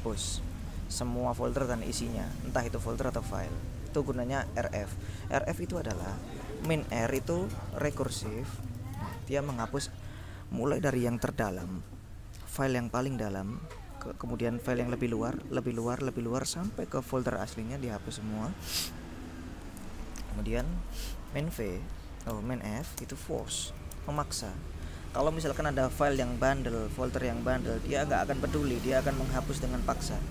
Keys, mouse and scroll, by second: 0.4 click, 1.6-4.6 drag, 5.0-6.3 drag, 6.7-9.7 typing, 20.7 ctrl+u, 21.4 ctrl+-, 21.7-24.8 typing.